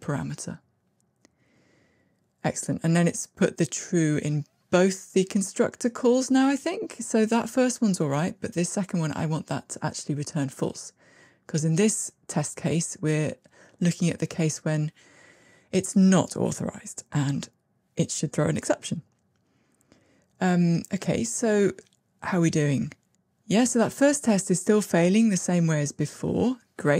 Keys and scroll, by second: 9.9 Delete, 19.4 ctrl+r.